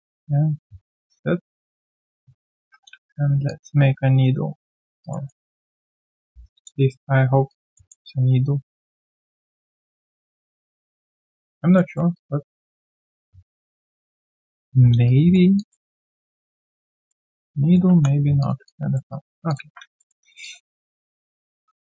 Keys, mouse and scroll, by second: 2.2-3.4 alt+scroll down 2, 5.0 alt+right click, 5.2 alt+middle click, 5.6 alt+right click, 6.0 alt+middle click, 6.4 right click, 7.7 alt+middle click, 7.9 w, 11.1 alt+right click, 11.4 alt+click, 11.7 alt+middle click, 12.1 alt+click, 12.6-13.2 alt+scroll down 1, 15.0 right click, 15.6 alt+click, 15.9 alt+middle click, 16.2 alt+click, 17.1 alt+middle click, 17.5 right click, 17.9 3, 18.0-18.5 scroll down 1, 18.5 scroll down 1, 18.6 alt+click, 19.1 alt+right click, 20.0 alt+middle click, 20.2 alt+right click, 20.4 alt+click, 20.7 alt+right click, 21.0 alt+click, 21.4 right click.